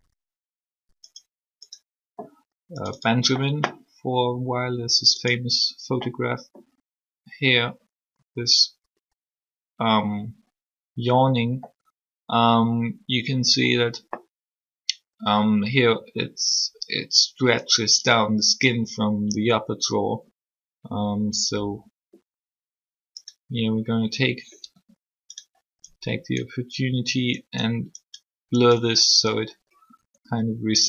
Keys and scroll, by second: 24.7 r, 29.9 r.